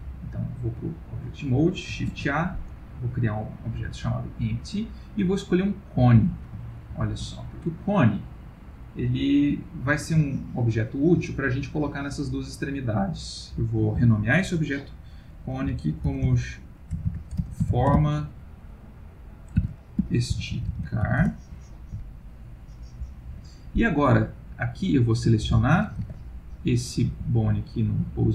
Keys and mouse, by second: 0.6 click, 2.1 shift+a, 6.7 ctrl+middle click, 6.9 ctrl+middle click, 7.4 middle click, 10.3 ctrl+middle click, 14.0 F2, 17.0 BackSpace, 22.2 ctrl+middle click, 24.5 click, 26.0 ctrl+Tab, 26.5 click, 27.1 g.